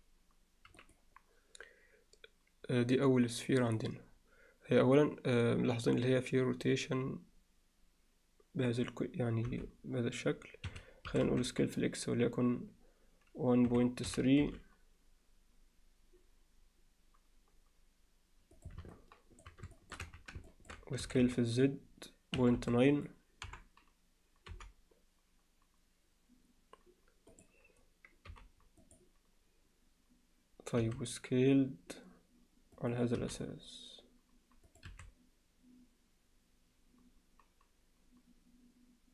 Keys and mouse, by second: 9.5 r, 11.1 s, 18.9-19.5 middle drag, 19.8 alt+shift+middle click, 20.0 z, 20.5 ctrl+alt+middle click, 21.0 s, 23.5 KP_7, 24.5 g, 28.3 g, 30.8 s, 33.2 g, 34.9 s.